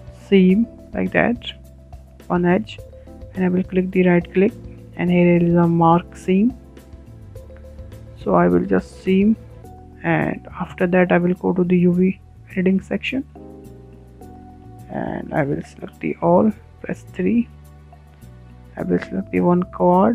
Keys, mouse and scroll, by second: 0.9-1.3 scroll up 5, 1.3-2.5 shift+middle drag, 2.5-5.7 right drag, 7.4-8.5 middle drag, 8.5-8.9 scroll down 4, 8.9-10.6 shift+middle drag, 10.6-11.9 drag, 11.9-12.2 shift+middle drag, 12.2-12.5 scroll down 3, 12.5 shift+middle click, 12.8-14.0 scroll up 11, 13.4-13.7 shift+middle drag, 14.0 shift+middle click, 14.6 a, 15.3 3, 16.4-16.7 scroll up 2, 17.8 shift+click, 18.2 shift+click.